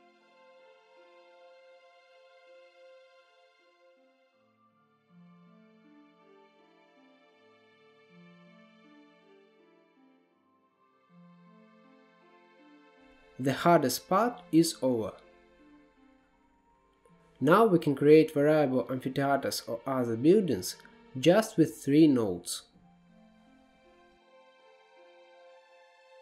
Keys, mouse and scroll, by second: 1.9-5.5 drag, 5.5 scroll down 1, 5.6 middle click, 5.7 click, 5.8 shift+a, 7.0-7.4 drag, 7.4 middle click, 7.7 click, 8.3 scroll down 1, 8.5 middle click, 9.3 click, 9.8 right click, 10.4 scroll up 5, 10.5 middle click, 11.3 click, 11.5 middle click, 11.7 click, 12.3 middle click, 12.5 scroll down 3, 12.6 click, 13.6-14.6 middle drag, 14.6 click, 15.4-16.7 middle drag, 16.7 click, 18.1-18.6 scroll up 2, 18.6-19.0 scroll down 1, 19.0-20.5 middle drag, 20.5-21.1 scroll up 2, 21.1-21.9 scroll up 6, 21.9 middle click, 22.8-24.6 drag, 24.6 scroll up 5, 24.9 click, 25.4-26.0 scroll down 2, 25.5-25.8 middle drag, 26.0 shift+middle click.